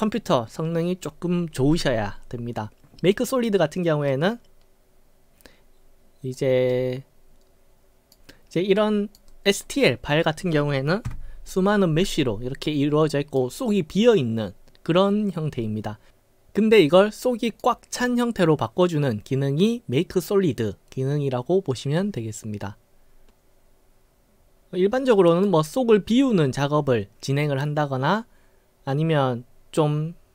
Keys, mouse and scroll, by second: 4.1-6.3 right drag, 6.7-8.1 right drag, 8.8-9.2 right drag, 9.3 middle click, 11.1 w, 13.2 right click, 16.8-17.7 right drag, 25.2-25.5 right drag.